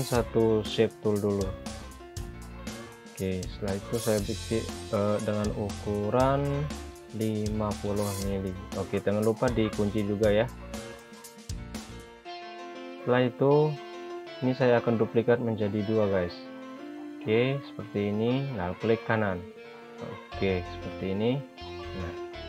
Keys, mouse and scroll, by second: 4.4 click, 6.8-7.1 typing, 7.5 Return, 11.7 click, 17.2 click, 19.3 ctrl+right click.